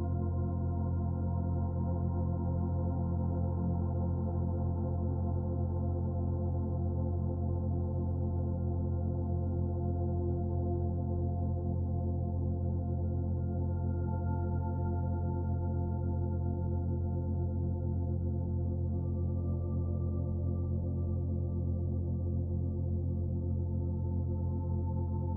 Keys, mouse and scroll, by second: 0.6-0.9 scroll down 2, 0.9 shift+middle click, 2.1 click, 3.1 click, 4.1 KP_1, 4.9-6.2 scroll up 2, 6.3-6.7 scroll down 2, 6.7 shift+middle click, 7.5 click, 10.0 click, 14.2 middle click, 15.3-15.6 scroll up 2, 15.7 shift+middle click, 17.0 s, 20.6 middle click, 23.0 e, 24.1 click.